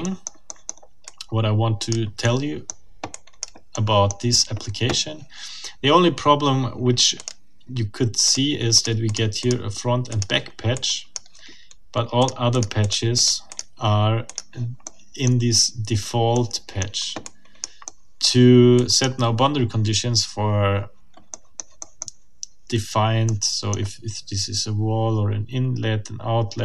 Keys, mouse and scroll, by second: 0.2 middle click, 1.1 click, 1.3 middle click, 1.5 click, 1.6 middle click, 1.7 click, 2.2 middle click, 3.1 click, 3.7 click, 4.1-4.4 scroll up 2, 7.2 click, 8.3 click, 8.8 click, 10.1 click, 10.7 click, 12.2 click, 12.8-13.1 scroll down 2, 13.2 click, 13.5 scroll down 2, 14.3 click, 14.8 right click, 15.2 middle click, 16.3 middle click, 17.2 click, 17.9 middle click, 18.4 click, 21.3 click, 21.7-22.7 scroll up 1, 23.3 click, 23.9-26.6 scroll up 1.